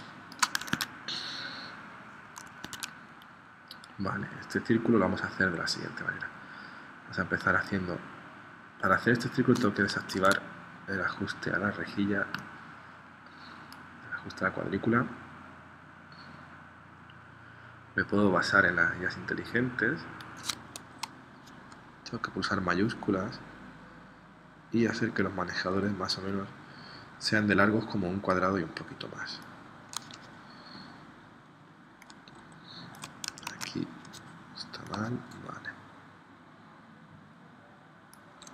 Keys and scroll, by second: 0.8 super+Tab, 2.6 super+Tab, 10.1 super+z, 33.5 super+z.